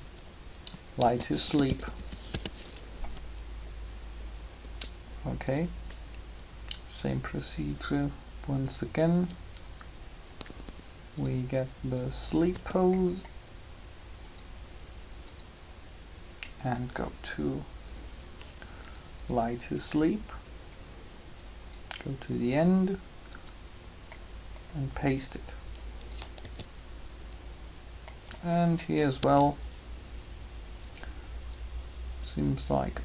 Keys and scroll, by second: 1.0-1.8 typing, 2.3 Return, 12.3 typing, 26.3 alt+a, 29.0 alt+a.